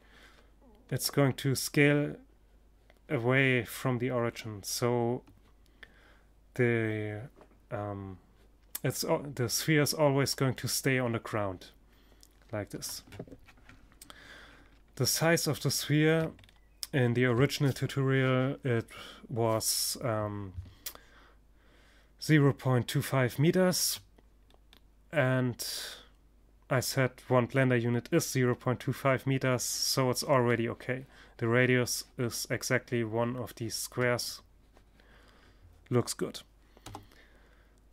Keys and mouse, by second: 13.9-16.9 middle drag, 22.9-25.4 middle drag, 32.6-35.3 middle drag, 35.3 KP_0, 37.3 g.